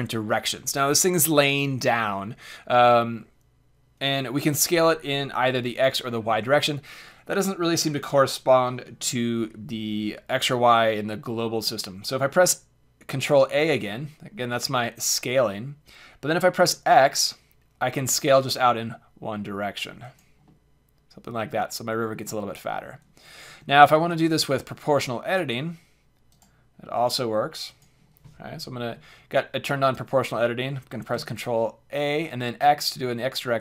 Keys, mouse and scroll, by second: 11.1-13.0 middle drag, 13.3 ctrl+a, 20.1-22.0 drag, 22.0-23.4 middle drag, 23.4 a, 24.0 c, 26.4 click, 27.0 right click, 28.1 click, 31.1 ctrl+a.